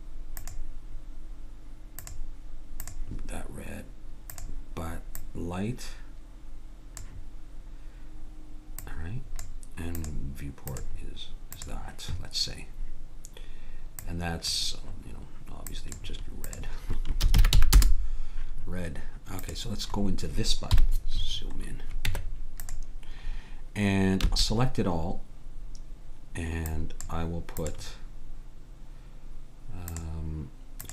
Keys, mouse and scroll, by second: 0.4-2.2 drag, 4.3-6.0 drag, 8.8-11.8 drag, 14.0-18.1 drag, 19.4-20.7 drag, 20.7 KP_Decimal, 22.1 Tab, 24.3 a.